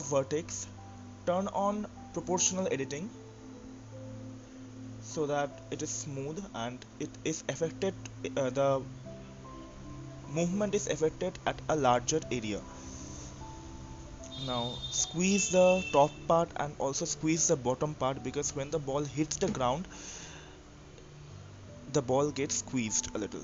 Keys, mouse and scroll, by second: 1.3-1.7 scroll down 1, 2.7-3.3 scroll down 2, 3.3-4.2 drag, 4.8 click, 6.7 click, 7.7-8.1 scroll down 1, 8.1 click, 8.6-9.7 scroll up 4, 10.1 click, 11.1 click, 20.7 click, 21.3 click, 22.4-23.4 middle drag.